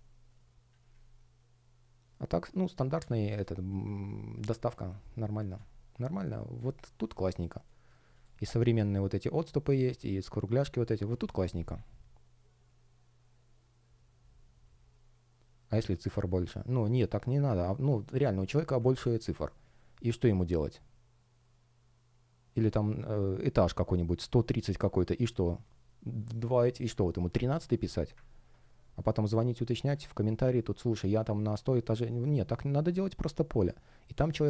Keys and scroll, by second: 3.4 space, 28.7 space.